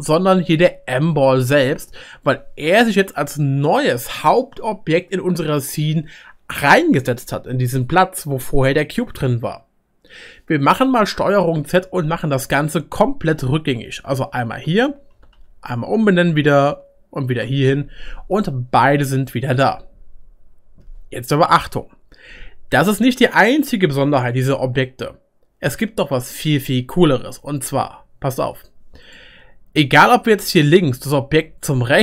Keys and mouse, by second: 14.4 ctrl+z, 14.6 ctrl+z, 15.1 ctrl+z, 15.3 ctrl+z, 15.9 ctrl+z, 16.6 ctrl+z, 19.6-28.2 middle drag, 29.0 click.